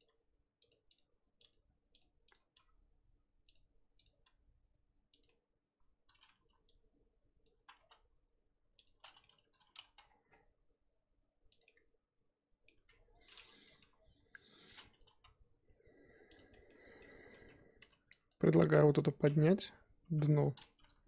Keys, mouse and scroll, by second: 0.0 click, 0.0 g, 0.9 click, 1.5 g, 2.3 click, 2.5 g, 4.0 click, 4.2 g, 5.3-6.4 middle drag, 6.4 z, 7.4 click, 7.6 z, 7.8 s, 9.1 middle click, 9.9 s, 11.6-12.7 middle drag, 12.7 Tab, 12.9 scroll down 3, 13.8 KP_3, 14.5-14.9 scroll up 4, 14.9 Tab, 15.1 s, 16.5 middle drag, 16.7 scroll up 2, 17.0-17.8 middle drag, 17.8 3, 18.3 click, 19.4-19.8 drag, 19.8 scroll up 2, 20.0 KP_1, 20.8 z.